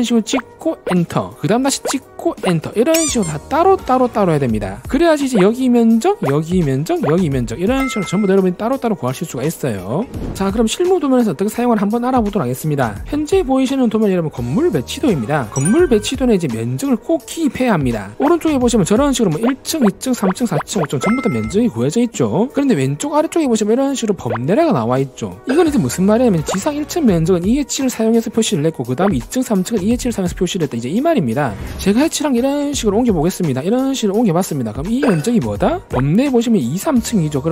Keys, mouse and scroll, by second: 0.5 right click, 1.1 right click, 2.1 click, 2.7 right click, 4.8 ctrl+1, 6.5 click, 7.3 click, 23.1 scroll up 2, 23.2 middle click, 23.2 scroll, 23.7 scroll down 2, 24.0-24.3 scroll up 2, 32.3 click, 32.8 click, 33.0 scroll up 2, 33.4 right click, 33.8 click, 34.4 middle click, 35.0 click.